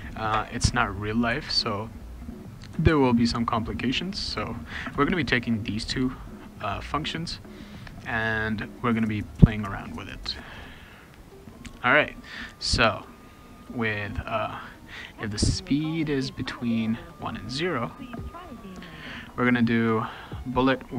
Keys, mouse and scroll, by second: 0.7 ctrl+c, 1.3 ctrl+x, 1.9 click, 2.4 click, 2.9 ctrl+v, 4.1 click, 4.9 Return, 17.0 click.